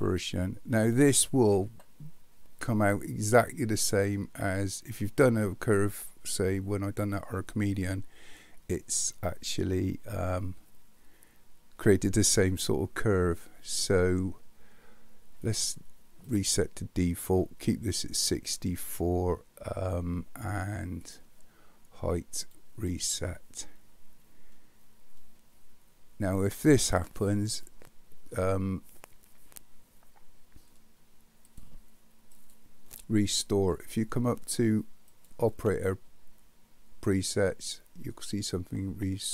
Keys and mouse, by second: 15.4-16.4 right drag, 21.1-22.6 right drag, 31.5-33.8 drag, 35.1-39.3 drag.